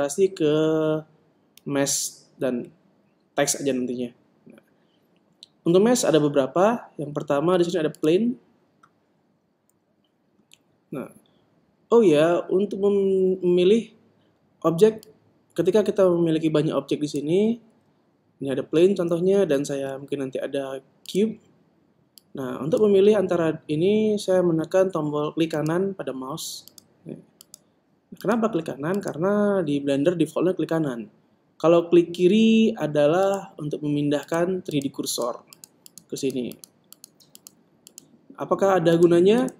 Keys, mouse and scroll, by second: 15.2 click, 18.9 shift+a, 19.9 shift+a, 22.4 click, 25.8-33.5 right drag, 33.5-39.5 drag.